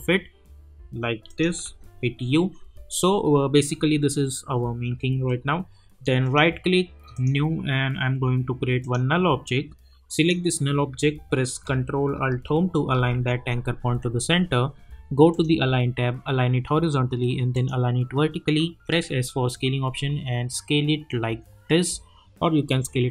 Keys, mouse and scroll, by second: 1.2 click, 1.6 u, 6.2 right click, 7.1 click, 12.8 ctrl+alt+Home, 15.3 click, 17.5 click, 18.9 s, 19.5-23.1 drag.